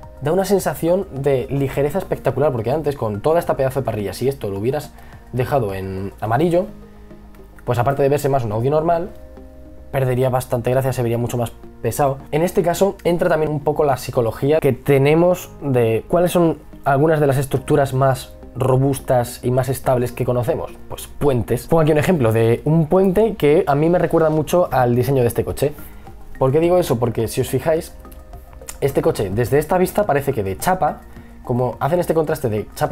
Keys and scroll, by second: 12.0-12.9 typing.